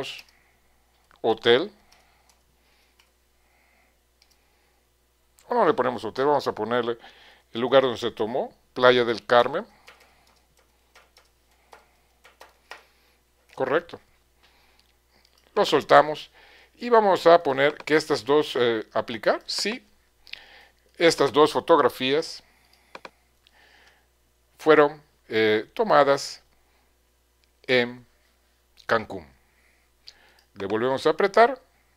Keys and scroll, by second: 0.0-4.4 typing, 7.0 BackSpace, 8.9-13.4 typing.